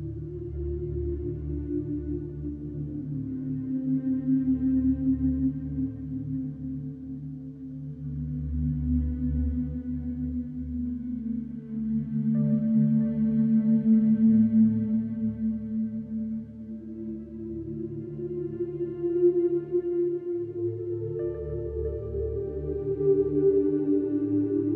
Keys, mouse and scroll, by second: 2.1 click, 4.4-11.1 drag, 12.6 click, 14.9 click, 16.9-19.3 drag.